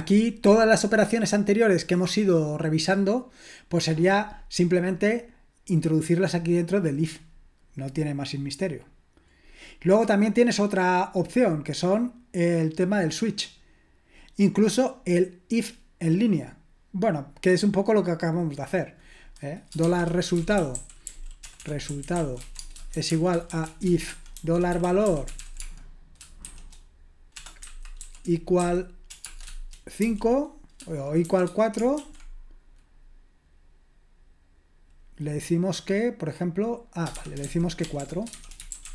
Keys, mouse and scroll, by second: 7.9-8.8 scroll down 1, 8.8-9.4 scroll down 1, 9.4-15.0 scroll down 1, 15.0-16.4 scroll down 1, 16.4-18.0 scroll down 1, 18.0-19.7 scroll down 1, 19.6-30.0 typing, 19.7 scroll down 1, 31.2-32.0 typing, 38.3-38.9 typing.